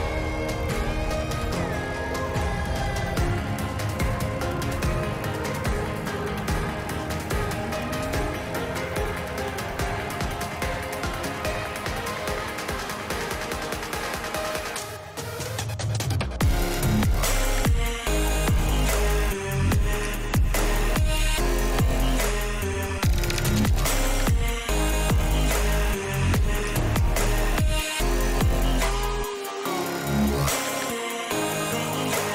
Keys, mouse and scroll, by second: 0.9 shift+middle drag, 1.4 click, 2.9 click, 5.1 click, 6.3 click, 6.8-7.7 drag, 8.7 shift+middle click, 9.1 shift+middle click, 10.3 shift+middle drag, 10.9 shift+middle click, 11.4 shift+middle click, 12.0-13.3 shift+middle drag, 15.0 shift+middle click, 15.9 click, 16.2 click, 16.6 click, 17.0 click, 17.2 click, 18.4 g, 21.3 Tab, 23.6 middle click, 25.4 Tab, 27.8 middle click, 28.3 click, 29.1 shift+middle click, 29.5 shift+middle click, 31.1 e.